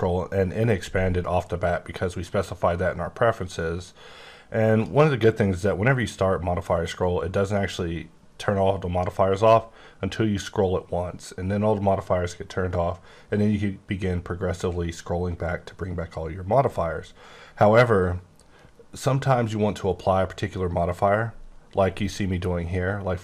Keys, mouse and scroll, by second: 3.8 click, 10.1 scroll up 1, 13.1-14.2 scroll up 4, 14.2 scroll up 1, 14.5-14.9 scroll, 14.9-15.8 scroll up 4, 15.8 scroll, 15.9-16.4 scroll up 2, 16.4-16.9 scroll down 10, 17.2-17.5 scroll up 8, 19.0-19.6 scroll down 3, 19.6-21.9 scroll up 4.